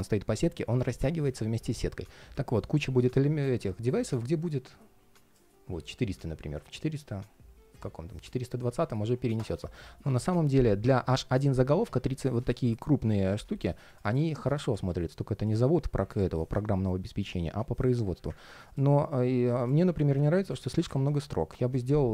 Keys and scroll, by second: 9.3 super+z, 14.6 alt+space.